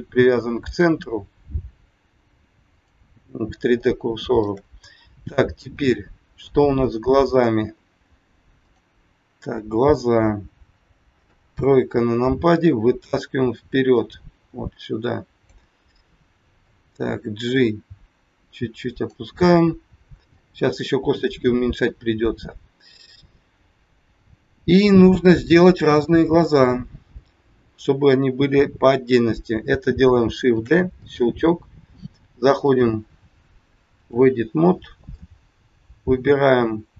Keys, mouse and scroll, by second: 2.9 click, 3.8 shift+middle click, 5.7 click, 6.8 middle click, 7.7 scroll up 3, 8.7 click, 11.2 KP_3, 12.3-12.7 scroll down 2, 13.4 click, 19.4 scroll up 3, 20.3 shift+middle click, 21.4 scroll down 2, 21.6 middle click, 26.8 scroll down 1, 30.6 shift+d, 32.6 click, 35.0 middle click.